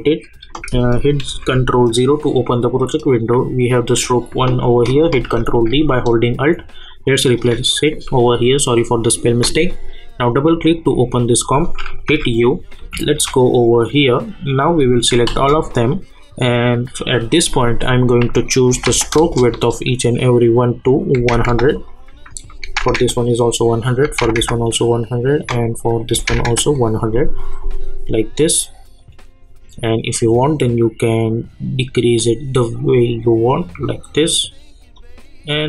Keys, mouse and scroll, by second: 1.3 ctrl+0, 3.0 click, 5.1 ctrl+d, 5.9-10.2 alt+drag, 12.1-13.1 typing, 15.3 ctrl+a, 18.3 click, 19.1 Return, 21.8 click, 28.0 scroll down 1, 29.0-35.6 drag.